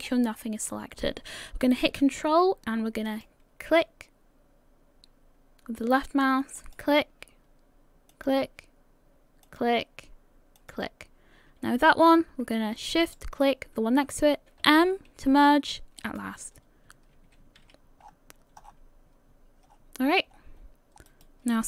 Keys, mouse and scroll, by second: 0.8-1.5 scroll down 1, 1.5-2.3 scroll down 6, 3.1 ctrl+click, 3.1-3.8 scroll up 1, 6.6 ctrl+click, 11.5 ctrl+click, 13.0 shift+right click, 14.6 m, 17.3 a, 17.6 a, 18.0 scroll down 2, 18.6 scroll down 11, 19.7-21.6 scroll up 15.